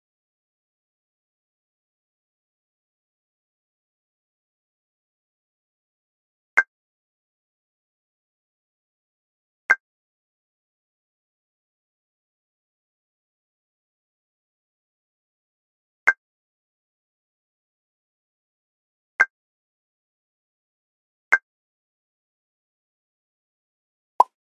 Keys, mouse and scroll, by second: 0.1 shift+middle click, 0.1-0.8 scroll up 4, 0.8 Escape, 0.8 e, 2.6 s, 6.6 ctrl+click, 7.5 middle click, 7.8 alt+click, 9.3-10.0 scroll up 7, 10.1 e, 13.4 ctrl+click, 13.6 scroll down 1, 13.6 KP_3, 13.9-14.6 scroll up 4, 14.6 s, 16.6 click, 16.6 middle click, 18.6 s, 19.4 click, 20.0 middle click, 20.5 alt+click, 20.9-21.4 scroll down 4, 21.4 shift+z, 22.6 shift+z, 23.0 middle click, 23.0 shift+z, 23.3 Tab, 23.8 alt+click, 24.0 middle click, 24.3 alt+click.